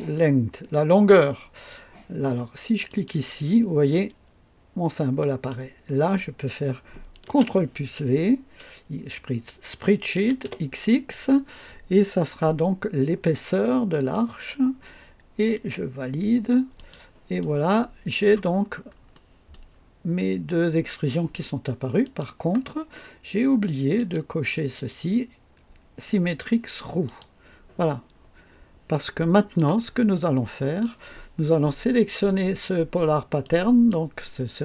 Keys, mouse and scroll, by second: 2.8 click, 5.1 click, 7.2 ctrl+v, 10.1 typing, 13.8 click, 15.5 click, 16.7 click, 17.3-18.4 drag, 18.6-19.0 scroll up 2, 19.0 right click, 22.0 click, 23.9 click, 24.5 click, 26.0 click, 27.0 click, 27.7-29.7 drag, 29.7-30.1 scroll down 2, 30.3 right click, 33.4 click.